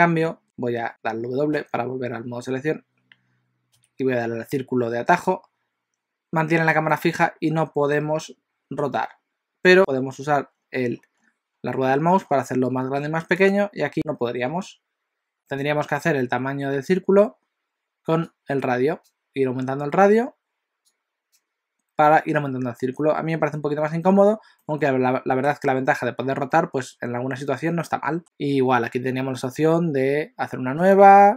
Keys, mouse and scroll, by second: 0.4 right click, 1.0 w, 1.7 w, 3.8 c, 14.1 click, 18.3 click, 20.9 click, 24.6 middle click, 26.5 middle click, 31.0 click.